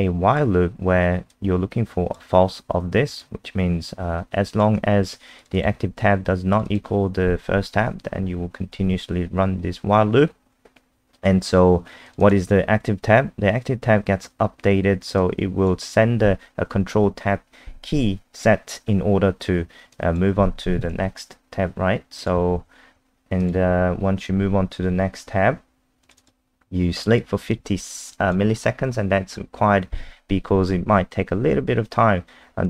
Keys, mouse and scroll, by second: 5.5 click, 6.5 click, 6.7 click, 12.1 click, 12.2 click, 15.2 click, 20.0 click, 22.6 ctrl+Tab, 23.4 click, 26.3 click, 27.2 click.